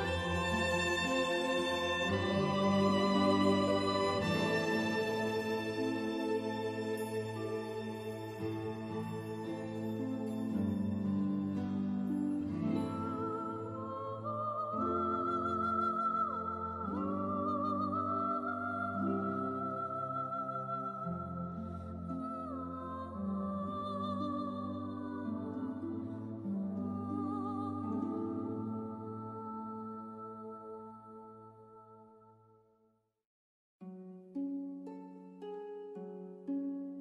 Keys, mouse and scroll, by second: 0.6 click, 8.2 s, 10.8-11.5 scroll down 1, 13.8 scroll up 1, 14.7 click, 19.0 c, 21.6 click, 24.5 F3, 25.5 click, 34.8 click.